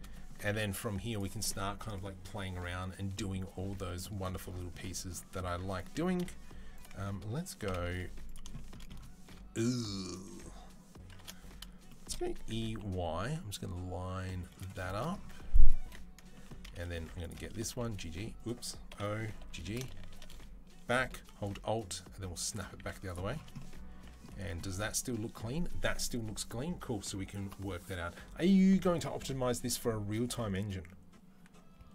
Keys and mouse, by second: 1.0-6.6 middle drag, 6.7-15.3 alt+middle drag, 7.5 KP_7, 7.8 z, 12.2 e, 15.3 click, 15.4-31.9 middle drag, 15.7 2, 16.9 1, 17.5 g, 18.7 o, 19.3 g, 22.7 z, 24.2 Tab.